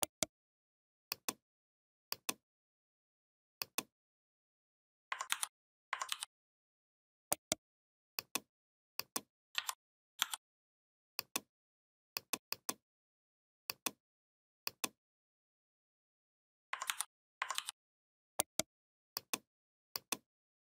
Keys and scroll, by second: 5.1 ctrl+c, 5.9 ctrl+f, 9.4 3, 10.0 5, 16.7 ctrl+c, 17.4 ctrl+f.